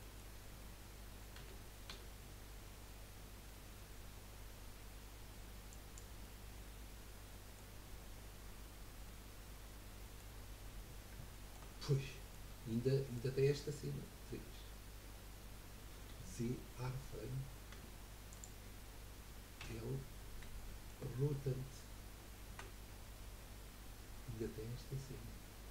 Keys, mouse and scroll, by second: 0.0-1.3 middle drag, 1.3 g, 6.2-8.7 middle drag, 8.7-9.0 scroll down 2, 9.0-10.4 middle drag, 10.4-11.3 scroll up 1, 11.3-14.3 shift+middle drag, 14.3 KP_3, 16.1 z, 17.7 Tab, 18.3 click, 19.6 l, 19.9-20.3 scroll up 3, 20.5-22.5 shift+middle drag, 22.5 r.